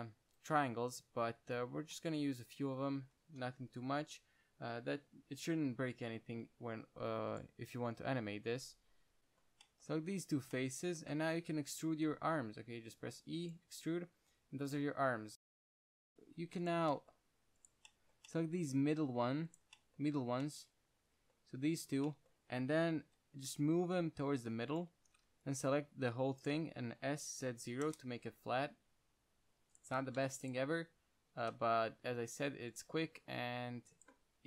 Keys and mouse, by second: 6.5 KP_1, 7.6-10.2 drag, 8.0 g, 9.2 ctrl+z, 11.9 KP_1, 12.5 e, 13.8-15.7 drag, 14.1 g, 15.7 z, 16.4 ctrl+Tab, 16.7 click, 17.2-17.9 drag, 20.6 z, 23.3 KP_1, 23.8 g, 25.1-27.0 drag, 25.3 z, 25.6 c, 26.8 z, 27.3 s, 30.2 z, 30.5 c, 31.8 middle click.